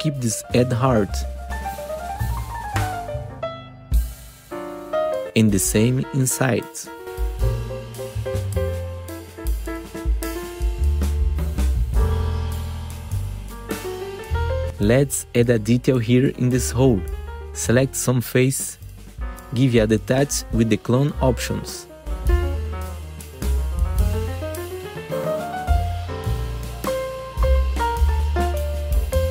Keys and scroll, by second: 0.0 ctrl+shift+c, 5.4 ctrl+shift+c, 6.6 2, 7.6 F4, 8.6 F4, 11.0 F4, 12.3 4, 19.1 F4, 23.5 F3.